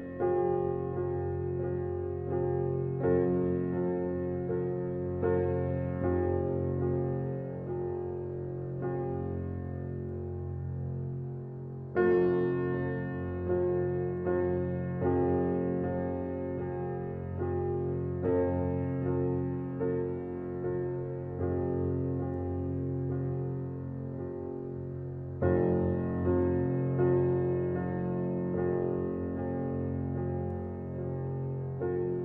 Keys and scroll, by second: 2.1 ctrl+g, 4.5 ctrl+j, 7.4 ctrl+t, 24.4 ].